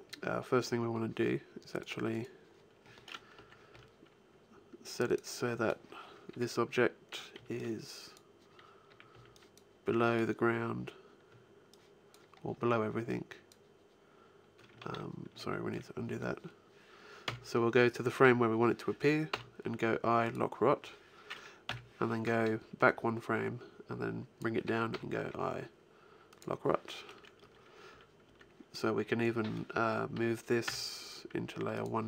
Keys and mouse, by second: 1.7-3.9 right drag, 3.2 Right, 3.6 Left, 7.2 b, 8.7 a, 9.0 b, 9.7 b, 11.5 click, 14.6 ctrl+z, 15.2 ctrl+z, 15.9-18.0 middle drag, 17.1 Right, 19.1 i, 21.5 Left, 22.0-24.4 drag, 24.8 i, 27.2 Right, 27.7 Left, 28.1 Right, 30.5 m.